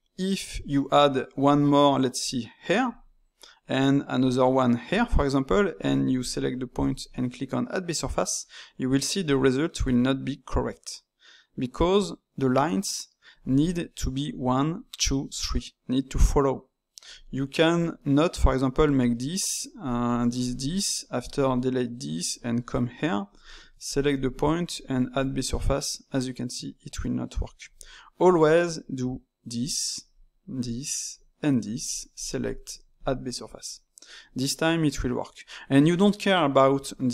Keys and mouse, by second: 2.1 click, 2.8 d, 4.1 click, 4.9 d, 5.8 alt+click, 9.2-12.2 drag, 12.5 ctrl+z, 18.1 d, 18.4 click, 18.8 d, 18.8 d, 19.8 click, 20.0-22.8 typing, 20.4 click, 21.0 right click, 22.2 click, 23.8 alt+click, 24.6-27.0 drag, 27.0 ctrl+z, 28.2-31.6 typing, 29.0 click, 30.1 click, 31.1 click, 32.1 alt+click, 32.9-35.9 drag.